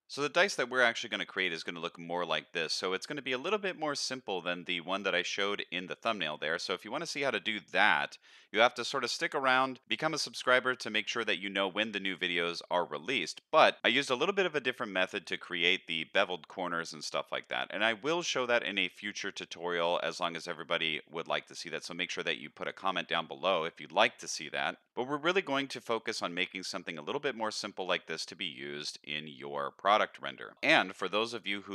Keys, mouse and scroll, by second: 0.4-1.1 middle drag, 1.5-3.3 middle drag, 3.5-4.2 middle drag, 4.5-5.1 middle drag, 5.4-6.8 middle drag, 7.0-7.6 middle drag, 7.9-8.4 middle drag, 8.6-9.1 middle drag, 9.3-9.7 middle drag, 9.8-10.3 middle drag, 10.6-11.1 middle drag, 11.4-13.1 middle drag, 14.2-15.3 middle drag, 16.6-17.2 middle drag, 17.5-17.9 middle drag, 18.4-19.1 middle drag, 19.3-19.9 middle drag, 20.1-20.6 middle drag, 21.4-21.7 middle drag, 23.5-23.9 middle drag, 24.5-24.9 middle drag, 26.2-26.9 middle drag, 27.2-28.0 middle drag, 28.2-28.9 middle drag, 30.1-30.5 middle drag, 31.1 click.